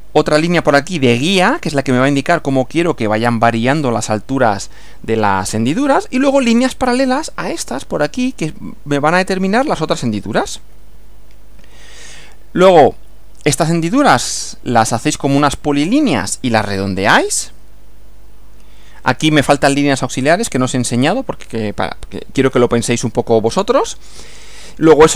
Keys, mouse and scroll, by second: 10.5 Right, 24.1 Right.